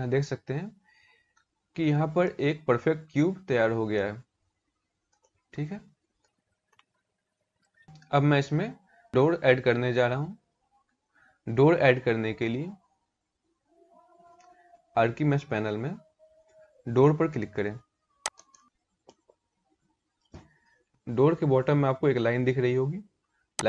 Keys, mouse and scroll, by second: 2.1-2.4 scroll up 5, 3.5 middle click, 4.8 middle click, 5.9 scroll down 4, 6.4 middle click, 9.7-10.3 scroll up 1, 10.3-11.2 scroll up 1, 13.6-14.2 scroll down 3, 14.8 scroll down 3, 17.9 click, 18.6 shift+middle click, 20.9 scroll up 2, 23.2 click.